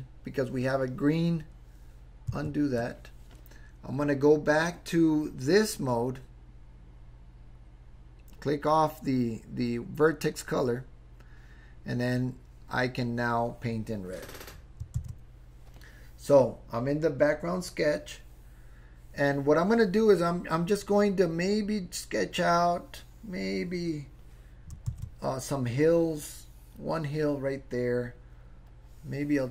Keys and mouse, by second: 2.4 super+z, 10.7 click, 13.0 click, 15.1 super+z, 21.5 click, 22.2-23.9 drag, 25.0 super+z, 25.8 click, 28.7 click.